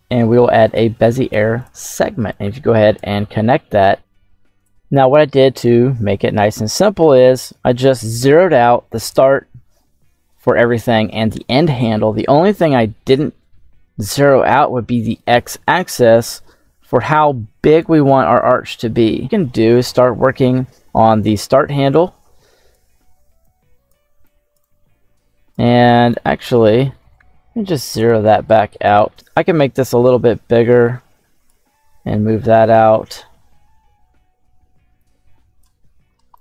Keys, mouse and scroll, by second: 2.2-2.9 drag, 3.9 click, 4.7 click, 6.6-9.7 scroll up 2, 16.2-19.2 drag, 19.2 middle click, 21.2-22.6 drag, 23.3 click, 24.1 click, 24.5 click, 26.0-27.8 drag, 28.4-31.5 drag, 31.8 middle click, 34.9-36.3 drag.